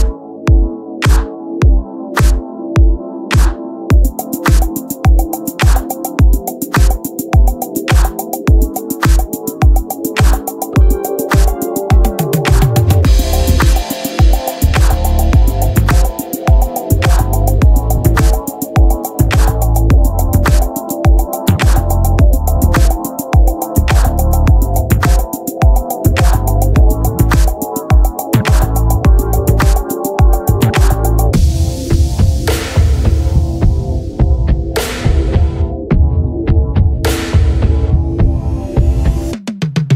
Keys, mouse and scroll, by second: 1.4 s, 2.7 Tab, 3.5 Tab, 3.6 KP_Divide, 4.3 KP_Divide, 5.5-7.2 drag, 6.6 Tab, 7.2 ctrl+Tab, 8.1 Tab, 8.4 ctrl+a, 8.9 Tab, 9.1-12.6 drag, 9.6 z, 10.5 z, 11.2 ctrl+b, 16.0 Tab, 17.2 s, 20.0 middle click, 21.3-22.4 drag, 22.1 Tab, 23.0 right click, 24.0 ctrl+b, 24.8 Tab, 25.1 ctrl+a, 25.5 Tab, 26.0 ctrl+b, 28.4 middle click, 31.7 i, 34.5 s, 39.9 s.